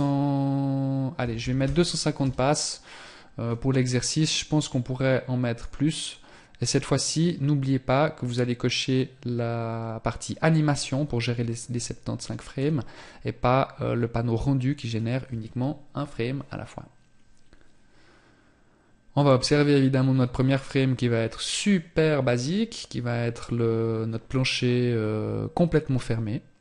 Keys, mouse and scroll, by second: 3.4 click, 11.3 click.